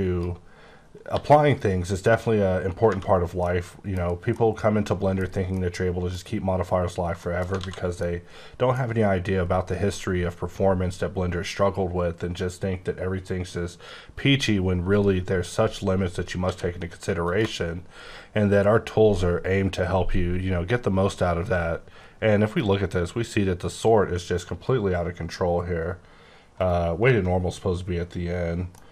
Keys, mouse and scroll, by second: 1.1 g, 2.9 space, 3.2 scroll down 2, 3.4 middle click, 4.0 scroll down 1, 4.3 middle click, 5.2 scroll down 1, 5.5 middle click, 7.1 shift+middle click, 7.3 shift+scroll down 2, 7.5 alt+a, 7.9 middle click, 14.9 click, 16.4 q, 17.2 shift+click, 17.7-18.0 scroll up 8, 18.5 scroll down 6, 18.8-20.2 scroll up 13, 20.2-20.5 scroll down 7, 20.8-21.2 scroll up 6, 21.3 scroll down 2, 23.5-23.9 scroll down 7, 23.9 scroll up 5, 24.1-24.6 scroll, 24.6-25.1 scroll up 2, 25.1-25.7 scroll down 4, 25.7-26.0 scroll up 8, 26.5 right click, 28.7 middle click.